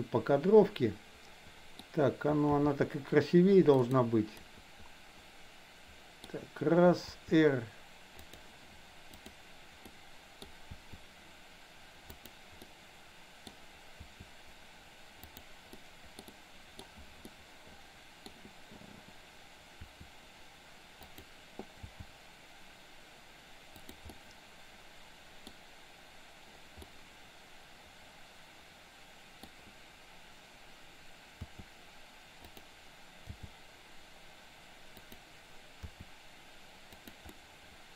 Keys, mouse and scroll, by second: 2.6 g, 4.3 scroll up 1, 4.6-6.2 middle drag, 6.2 scroll down 1, 7.1 r, 9.1 click, 9.9 middle click, 10.7 r, 12.7 middle click, 13.9 r, 15.7 middle click, 16.3 middle click, 17.3 middle click, 19.8 r, 21.7 g, 24.2-25.4 middle drag, 26.8 scroll up 1, 26.9-29.4 middle drag, 31.3 r, 33.3 g, 35.8 r, 37.3-37.9 middle drag.